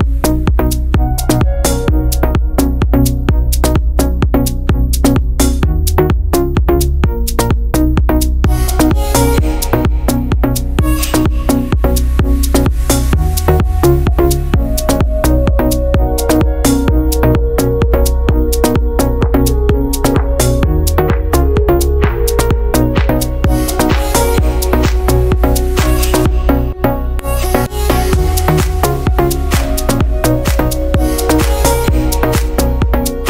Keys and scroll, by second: 15.1 ctrl+z, 30.6 ctrl+z.